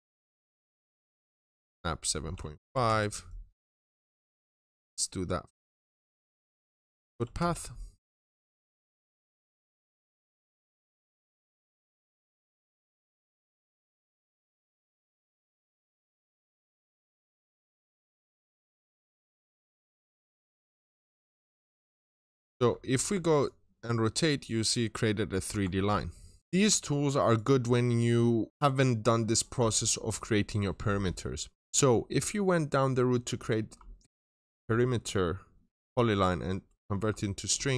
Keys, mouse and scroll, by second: 0.4 click, 0.8 double click, 2.0-2.4 typing, 2.7 Return, 3.2-4.0 scroll down 2, 3.4 middle click, 4.0-4.7 scroll up 1, 5.7 click, 6.5-7.8 typing, 7.8 scroll down 1, 8.0 middle click, 8.6 scroll up 1, 9.7 click, 10.5-10.9 typing, 11.9 middle click, 11.9 typing, 13.3-13.9 scroll down 1, 13.9 click, 14.2 middle click, 15.0-15.5 typing, 16.2-16.6 scroll down 2, 16.3 middle click, 17.0 scroll up 1, 17.6 click, 17.9 double click, 19.2 click, 20.0-20.6 typing, 21.1 right click, 21.8-22.7 scroll down 3, 22.1 middle click, 22.3-23.0 typing, 22.9-25.8 middle drag, 25.5 ctrl+shift+scroll up 2, 26.4 click, 27.0 right click, 28.4 click.